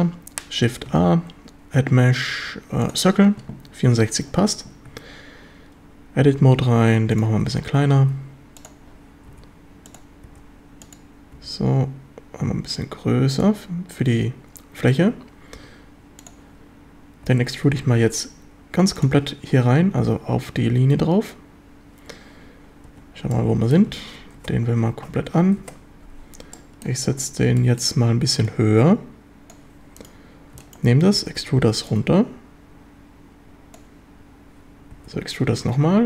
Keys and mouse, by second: 0.9 shift+a, 4.9 Tab, 6.4 s, 7.2 click, 7.4 1, 8.0 s, 8.7 click, 9.3 s, 9.9 click, 10.3 g, 10.9 click, 11.4 s, 13.4 click, 15.6 s, 16.2 click, 17.3 e, 17.6 Escape, 17.9 s, 19.0 click, 22.9-25.6 typing, 23.4-23.8 drag, 26.6 drag, 26.9 middle click, 27.6 middle drag, 28.5-29.5 drag, 31.2 e, 31.4 Escape, 31.9-33.8 drag, 35.0 e, 35.7 Escape.